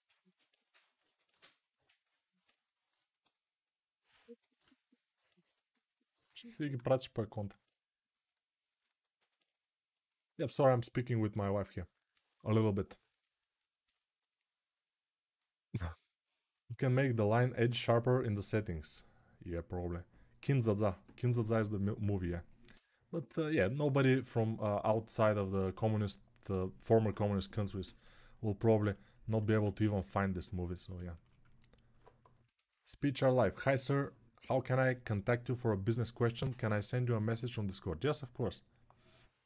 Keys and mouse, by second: 4.5 alt+q, 29.4 alt+q.